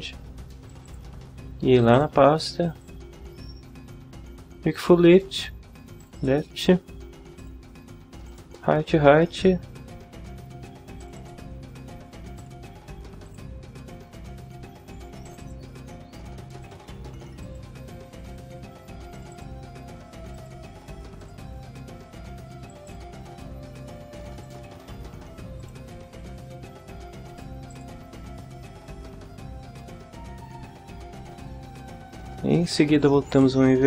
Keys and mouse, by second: 0.7 click, 1.8 click, 2.7 click, 6.0 click, 7.4 click, 8.3 click, 11.0 click, 12.4 click, 13.2 click, 15.2 click, 16.6 click, 17.4 click, 19.1 click, 20.3 click, 21.2 click, 22.7 click, 24.4 click, 25.6 click, 27.3 click, 27.7 click, 33.3 click.